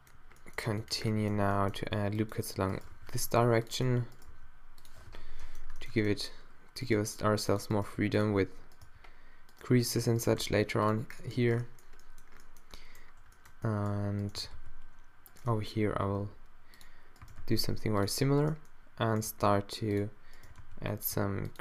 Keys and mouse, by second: 1.4 a, 1.8 ctrl+r, 3.0 z, 3.3 ctrl+r, 4.3 d, 5.1 o, 5.4 super+middle click, 7.0 g, 7.8 click, 7.8 g, 8.8 g, 10.4 click, 10.4 d, 11.1-12.2 middle drag, 14.4 g, 15.7 click, 16.1 g, 17.2 click, 17.3 g, 18.7 click, 18.8-19.9 middle drag, 19.3 g, 20.0 middle click, 20.5 g, 21.2 g.